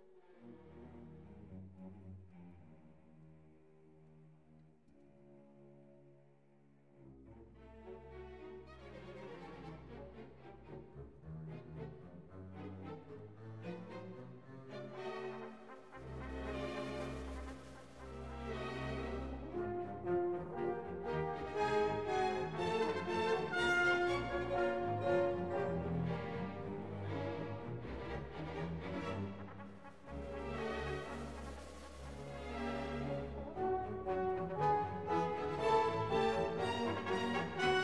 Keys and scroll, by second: 7.4 BackSpace, 7.9 6, 8.1 Return, 12.8 BackSpace, 12.9 4, 13.1 Return, 19.2 BackSpace, 19.5 2, 19.9 BackSpace, 20.1 1, 20.4 Return, 25.0 2, 25.4 Return.